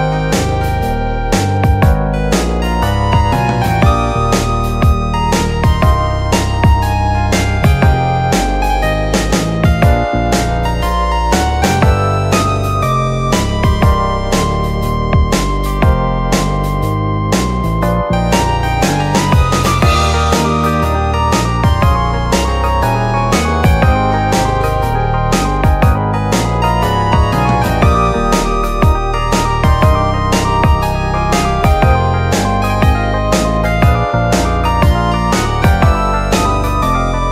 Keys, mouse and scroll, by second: 3.4-5.7 middle drag, 5.7 click, 6.8 click, 7.4 shift+click, 7.9 middle click, 8.4 click, 9.6-10.5 middle drag, 10.5 click, 12.8 click, 13.6 click, 14.2 shift+click, 15.1-16.7 right drag, 16.7 click, 17.3 click, 18.6-19.5 middle drag, 19.5 click, 20.3 click, 21.8 click, 22.6 click, 24.3 click, 24.9-27.3 middle drag, 27.3 Tab, 28.4-31.0 drag, 32.3 Tab, 32.6 Tab, 33.2 shift+a.